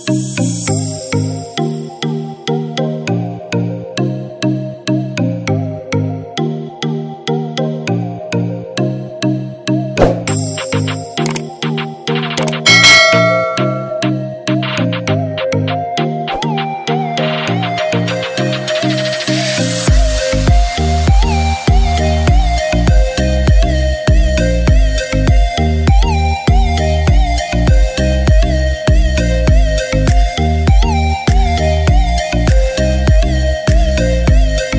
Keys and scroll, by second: 11.2-11.7 typing, 13.5 typing, 15.0 typing, 19.0 [, 22.8 ctrl+j, 29.3 ctrl+BackSpace, 34.3 ctrl+t.